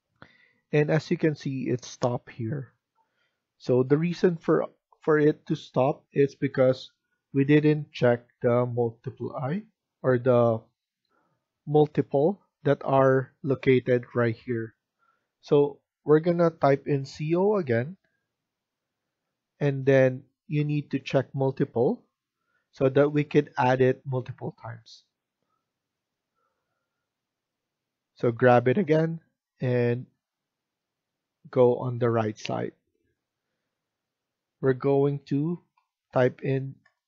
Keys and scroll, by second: 11.0 F1, 11.1 F1, 16.9-18.0 typing, 35.5-36.9 typing.